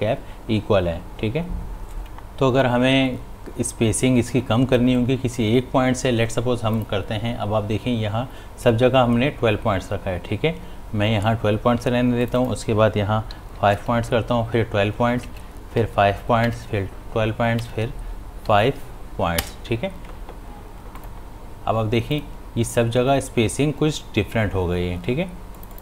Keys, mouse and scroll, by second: 6.7 click, 12.2 click, 13.8 Tab, 21.0 click, 25.5 click.